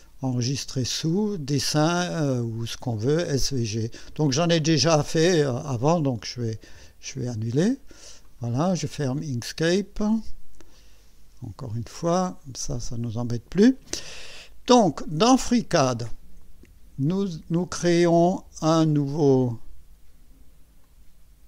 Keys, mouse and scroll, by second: 8.3 click, 8.8 click, 10.7 click, 12.3 click, 15.2 click, 18.8 click, 20.8-21.4 drag.